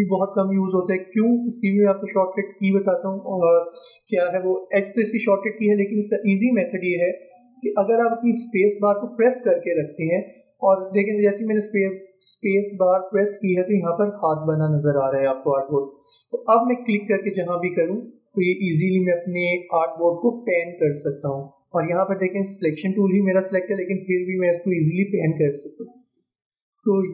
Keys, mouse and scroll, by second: 3.1 click, 9.1 space, 16.9 space.